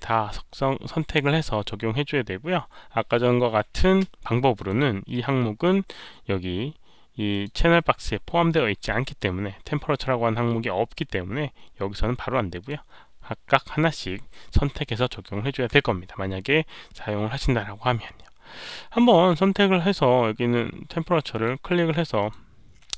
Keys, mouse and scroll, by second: 4.5 shift+click, 7.2 shift+click, 12.5 shift+click, 18.1 click, 19.0 click, 21.2 click, 22.1 click.